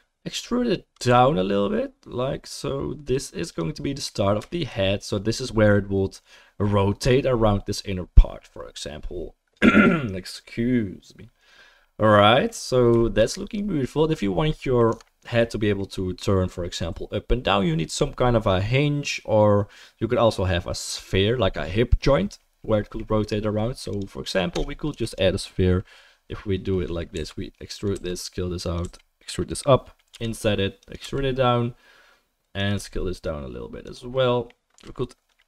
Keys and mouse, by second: 1.0 e, 14.9 Tab, 24.5 Tab, 24.9 3, 27.1 e, 27.9 s, 28.8 e, 30.1 i, 31.0 e, 32.8 s.